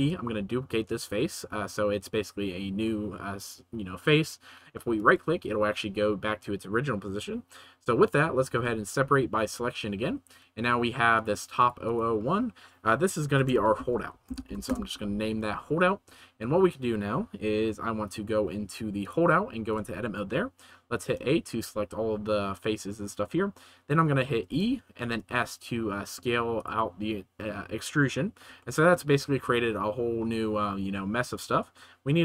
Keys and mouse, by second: 8.5 p, 10.3 Tab, 11.8-14.7 right drag, 19.0 right click, 19.7 Tab, 21.1 a, 24.4 e, 25.0 s, 26.5 right click, 28.8 shift+click.